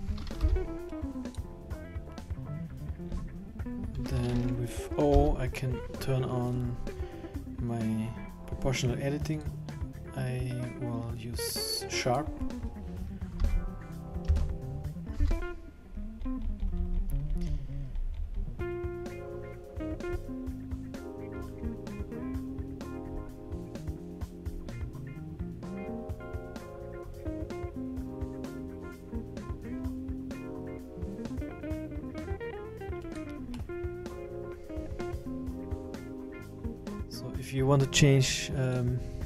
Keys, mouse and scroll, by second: 0.4 b, 2.8-3.1 scroll down 3, 3.1-3.4 scroll up 3, 5.1 o, 9.4 click, 13.4 s, 15.1 s, 33.5 middle click, 36.2 middle click, 36.8 middle click, 36.8-37.1 scroll down 10, 38.7 click.